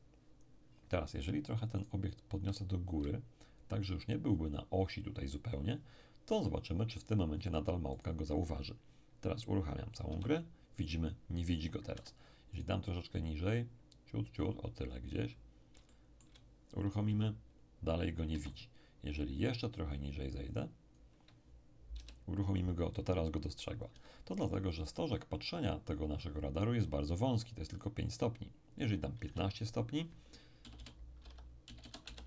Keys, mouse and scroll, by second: 1.8-5.3 right drag, 2.6-5.3 drag, 7.9 right click, 10.1 p, 11.9 Escape, 12.5-15.2 right drag, 13.3 click, 15.2-15.9 scroll up 1, 15.9-17.2 shift+middle drag, 17.1 shift+p, 18.3 Escape, 19.4-21.9 drag, 21.9 p, 23.9 Escape, 24.9 right click, 28.8 click, 29.1 1, 29.3 5, 29.3 6, 30.6-31.8 typing, 32.1 Return.